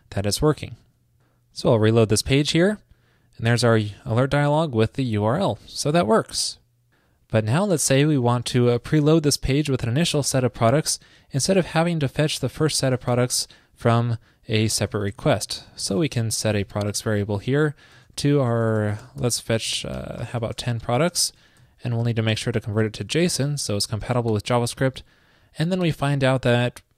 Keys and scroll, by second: 0.8 super+s, 13.1 super+Return, 20.1 ctrl+shift+>, 24.0 alt+Left, 24.1 alt+Left, 24.3 alt+Left, 24.6 alt+Left.